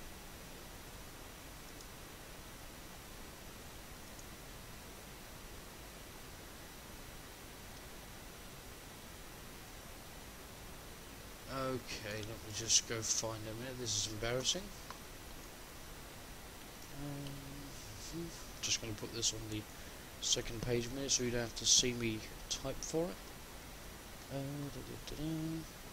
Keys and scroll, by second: 16.9 shift+F10.